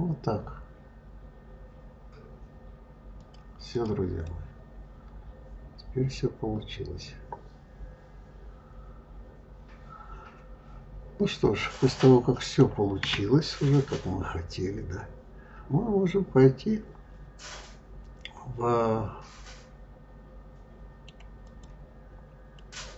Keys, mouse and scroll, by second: 3.5 click, 4.1-7.1 middle drag, 12.5 scroll down 1, 12.8-13.6 scroll up 4, 13.6-16.6 middle drag, 21.3 click, 22.4-22.9 middle drag.